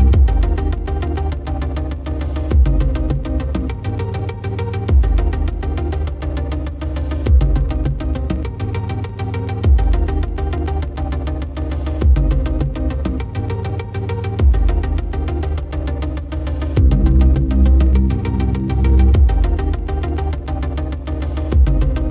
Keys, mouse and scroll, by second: 0.4 click, 4.1-8.7 drag, 5.8 super+z, 6.0 BackSpace, 6.1 BackSpace, 11.1 click, 11.2-12.9 drag, 13.6 drag, 14.1 click, 16.9 Tab, 17.7-19.2 typing, 20.3 Return, 21.1 r, 21.4 z, 21.9 x.